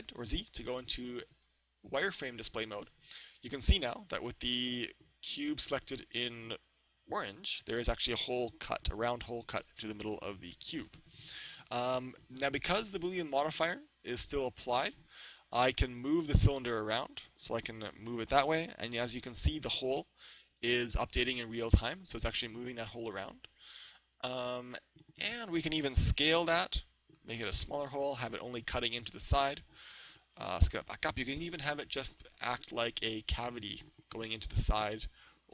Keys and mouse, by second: 3.2-5.2 middle drag, 7.4-9.3 middle drag, 16.1 right click, 17.5-19.5 drag, 18.9 z, 20.6-22.9 drag, 26.3 s, 27.5-29.3 drag, 28.7-29.7 middle drag, 30.4 s, 30.8-33.1 drag, 32.9-34.7 middle drag.